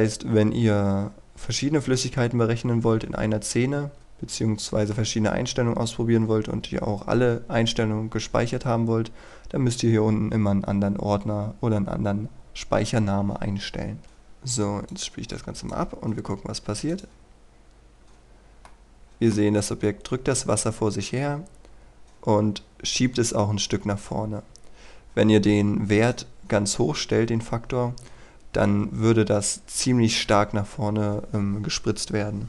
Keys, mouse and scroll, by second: 4.0-5.9 middle drag, 14.0-16.8 drag, 18.8 middle click, 26.2 right click.